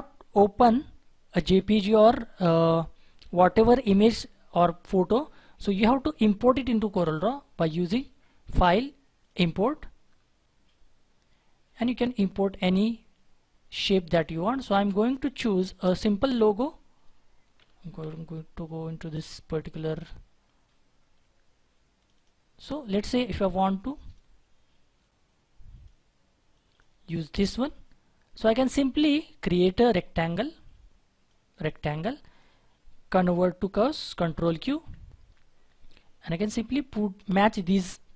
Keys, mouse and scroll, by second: 17.6-17.9 typing, 20.4-21.1 scroll down 1, 21.1 typing, 22.1 double click, 27.3-27.7 scroll down 1, 27.8 scroll up 1, 34.6 ctrl+q, 37.3-38.1 scroll up 1.